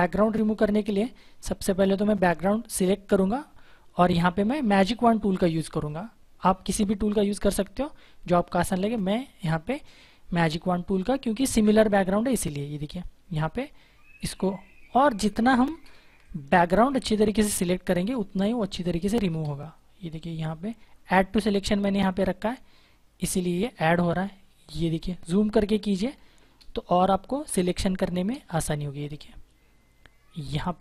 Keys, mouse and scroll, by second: 5.7 right click, 6.7 click, 9.3 click, 14.1-16.4 typing, 16.1 click, 17.6 ctrl+=, 17.9 space, 18.2 click, 18.6 space, 20.3 click, 23.1 click, 25.7 ctrl+=, 26.1 space, 26.5 click, 26.6 space, 27.8 click, 30.4 space.